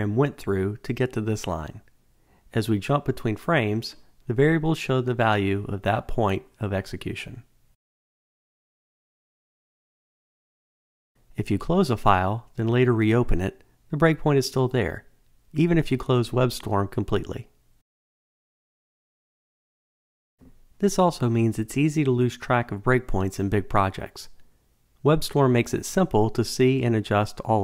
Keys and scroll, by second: 8.3 alt+super+r, 25.2 ctrl+shift+super+F8.